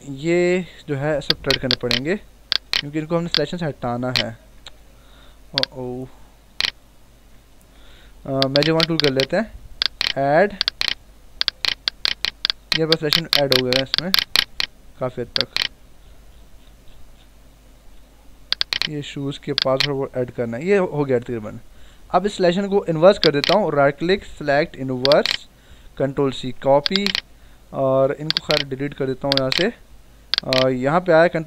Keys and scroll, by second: 4.6 ctrl+alt+z, 7.6 ctrl+alt+z, 20.6 ctrl+-, 26.2 ctrl+c, 31.1 ctrl+v.